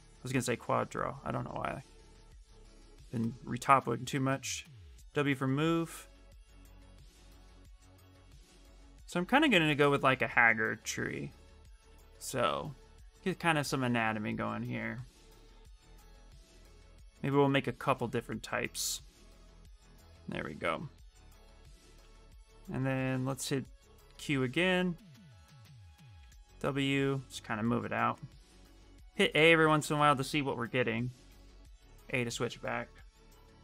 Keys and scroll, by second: 4.5 alt+w, 23.2 q, 25.9 w, 28.7 a, 30.4 shift+a, 31.0 a.